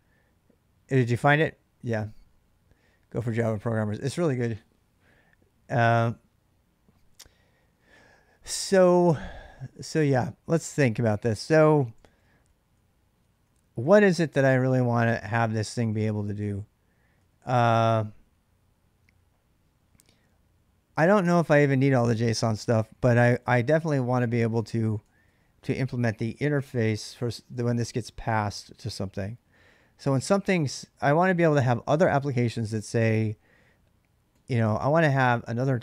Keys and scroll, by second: 10.5-14.4 typing, 15.9 j, 16.1 j, 17.0 k, 17.2 k, 20.9-25.4 typing, 26.7-29.9 typing, 34.1-35.8 typing, 34.9 Return.